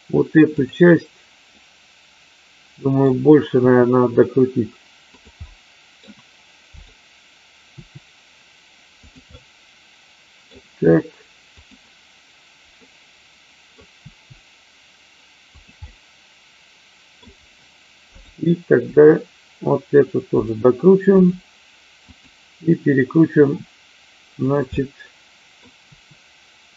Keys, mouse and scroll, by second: 0.5 click, 1.5-3.1 middle drag, 3.6 r, 5.0 click, 5.4 middle click, 6.6 click, 7.8 r, 9.3-10.5 middle drag, 11.5 click, 12.8 middle click, 14.0 r, 15.7-17.1 middle drag, 18.0 click, 18.9 r, 21.1 click, 21.9 click, 23.4 r, 24.4 click, 24.6 middle click, 25.7 r.